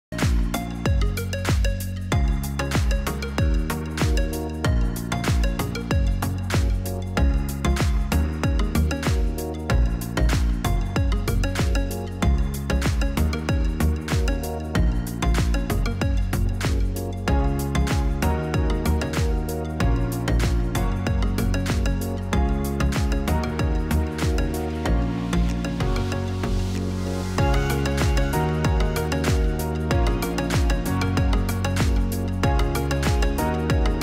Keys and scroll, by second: 3.6 0, 14.4 0, 22.3-23.3 typing, 26.4 0, 33.0 ctrl+z.